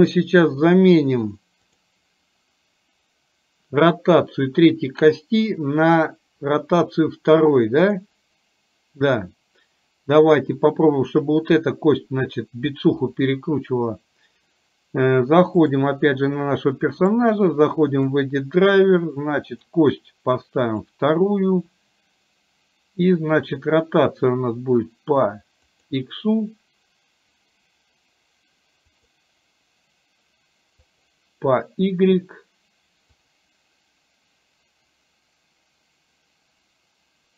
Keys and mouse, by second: 1.7 click, 7.9 click, 15.6 click, 17.2-37.3 right drag.